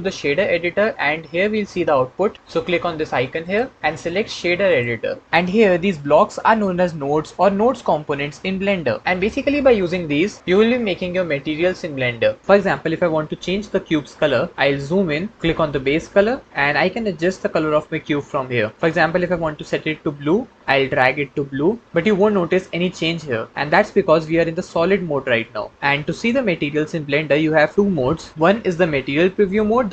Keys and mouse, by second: 3.4-4.8 drag, 6.5 click, 15.9 click.